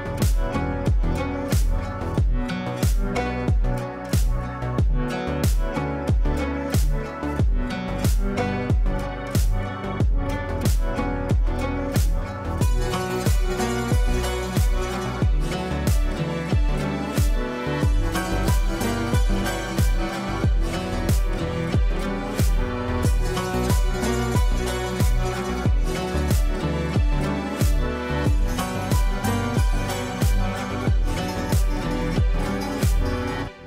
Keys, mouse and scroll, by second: 5.2-7.5 ctrl+drag, 7.8 ctrl+click, 8.6 ctrl+right click, 10.3 click, 11.2 shift+Page_Up, 13.0 click, 15.9 click, 18.7 click, 25.3 click, 27.4 F3, 27.8 F2, 28.2-32.3 drag, 32.3 F3, 32.7 F2, 33.0-33.6 drag.